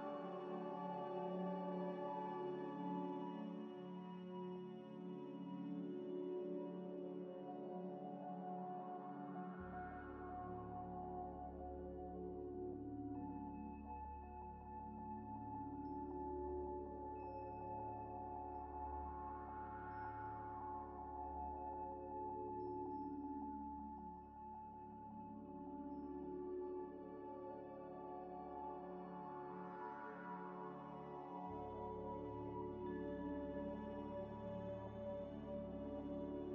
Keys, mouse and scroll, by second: 0.0 scroll up 1, 0.4-3.7 typing, 4.2 scroll up 1, 4.4 scroll down 1, 4.6 middle click, 5.1 scroll down 1, 5.5 g, 5.5 x, 6.4 middle click, 7.3 g, 7.4 x, 8.0 Tab, 8.2 Tab, 8.5 alt+click, 9.3 ctrl+b, 10.4 Tab, 10.8 shift+d, 11.0 g, 11.2 y, 12.8 shift+click, 13.3 middle click, 13.7 g, 13.8 x, 16.4 scroll up 1, 17.1-18.2 typing, 17.8 click, 18.9 click, 18.9 double click, 19.3 shift+click, 19.7 shift+click, 20.5 ctrl+-, 21.3 right click, 22.3 ctrl+z, 23.1 right click, 23.9 ctrl+z, 24.0 ctrl+right click, 24.6 double click, 28.6 scroll down 1, 29.4 shift+click, 30.2 scroll up 1, 30.7 scroll down 1, 31.2 right click, 31.9 g, 32.0 x, 32.7 ctrl+z, 33.2 double click, 33.9 shift+click, 34.2 scroll up 1, 34.5 scroll down 1, 34.7 g, 34.8 x.